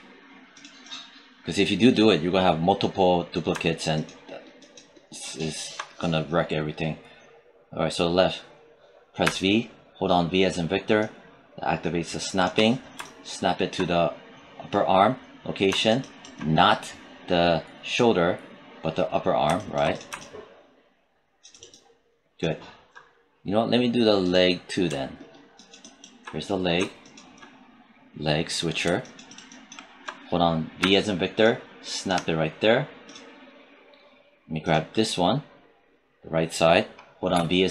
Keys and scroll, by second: 9.1 v, 30.7 v, 37.2 v.